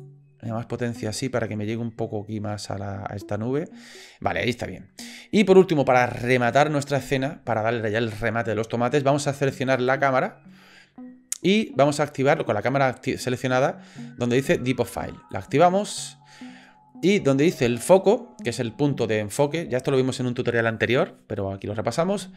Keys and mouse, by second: 9.9 click, 15.3 click.